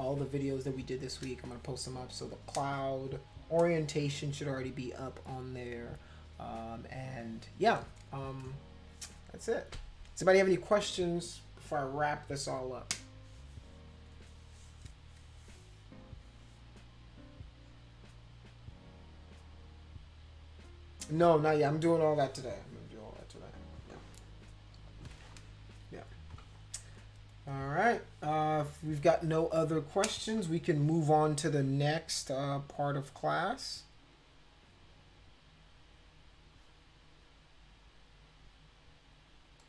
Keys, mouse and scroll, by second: 39.6 click.